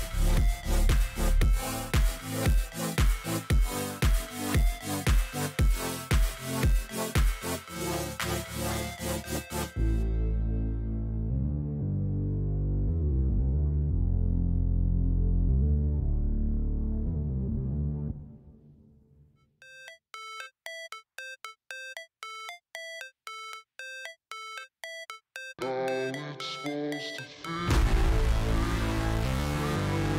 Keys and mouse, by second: 0.3-1.7 drag, 3.6 click, 6.8-8.5 drag, 9.5 click, 10.5 click, 11.3 click, 13.1-14.2 drag, 16.4 click, 18.5 click, 19.5 shift+click, 20.9 click, 22.5 click, 24.6-25.7 drag, 26.5 click, 28.4 click.